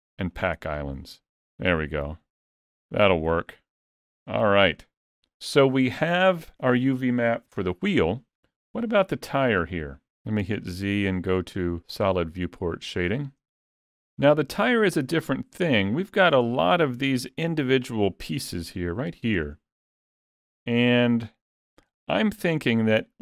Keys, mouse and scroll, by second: 1.7 alt+a, 3.3 middle click, 3.8 Tab, 4.5 alt+a, 4.8 middle click, 9.7 click, 10.4 z, 12.9 middle click, 14.1 middle click, 14.7 click, 15.1 middle click, 16.1 middle click, 17.5 Tab, 17.7 middle click, 19.0 l, 19.5 middle click, 22.2 alt+a, 22.6 middle click.